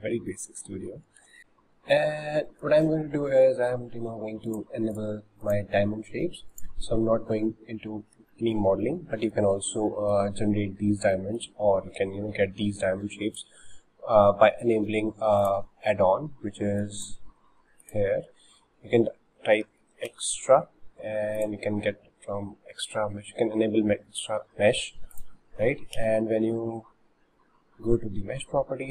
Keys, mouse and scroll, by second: 1.2 shift+a, 1.4-1.9 scroll up 3, 2.5-4.5 shift+middle drag, 4.5-6.4 drag, 6.5 click, 7.1-7.7 scroll up 4, 8.4-9.6 shift+middle drag, 9.6 scroll down 1, 9.9-10.4 middle drag, 10.4-10.8 scroll up 4, 11.1-13.3 shift+middle drag, 13.3-19.8 drag, 25.6 scroll down 3, 26.0 shift+a.